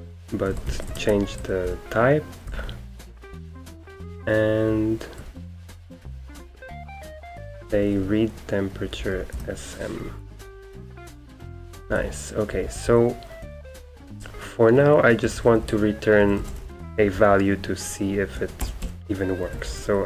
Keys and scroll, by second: 0.0-4.1 typing, 1.1 Escape, 5.2-6.5 typing, 7.6-20.0 typing.